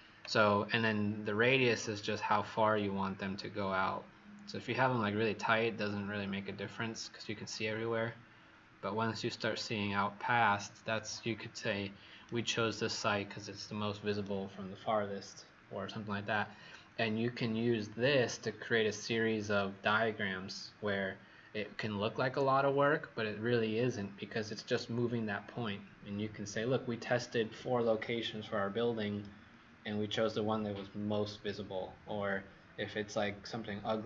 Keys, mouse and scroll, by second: 1.7 click, 2.2 click, 12.1 right click.